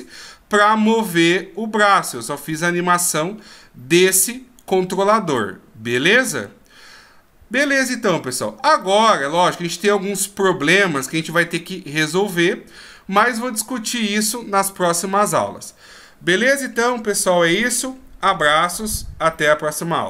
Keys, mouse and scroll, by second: 2.1 right click, 5.4 middle click, 8.8 middle click.